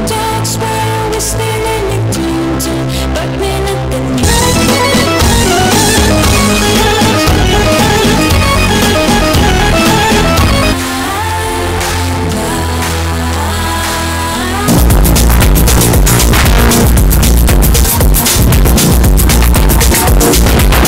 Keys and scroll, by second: 1.4 Page_Down, 11.3 Page_Down, 20.8 space.